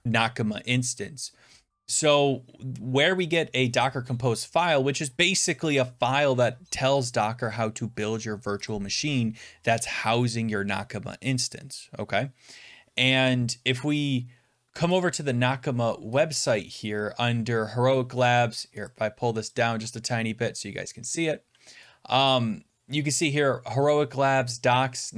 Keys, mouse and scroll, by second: 14.9 click, 15.7-16.2 scroll down 8, 16.2 scroll up 12, 16.4 scroll down 4, 16.6 scroll up 5, 17.9-18.6 scroll down 10, 18.9 scroll, 21.1-21.6 shift+scroll.